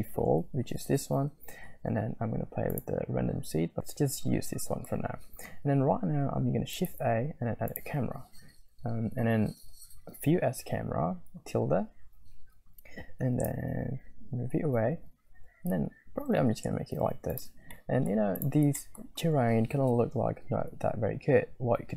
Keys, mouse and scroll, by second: 0.0 click, 2.7 click, 4.4 middle click, 4.6 middle click, 6.8 shift+a, 13.3 shift+`, 17.8 click, 18.7 shift+middle click, 19.0 scroll up 1.